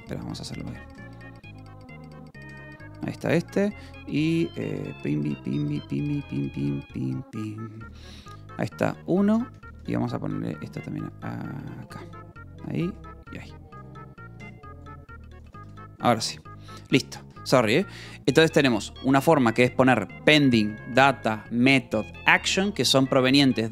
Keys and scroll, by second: 0.6 Return, 0.9 Escape, 1.1 k, 1.4 a, 2.0 space, 2.4 Escape, 3.0 j, 4.8 a, 5.1 BackSpace, 5.6 Return, 6.9-15.9 typing, 11.8 Escape, 14.3 Escape, 17.5 j, 19.1 shift+v, 19.5 Escape, 19.7 l, 23.1 f, 23.5 u.